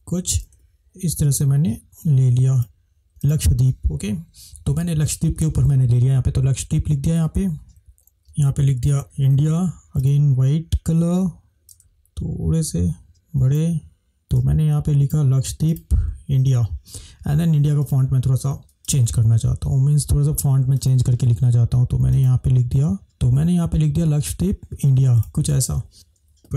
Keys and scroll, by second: 9.0 shift+d.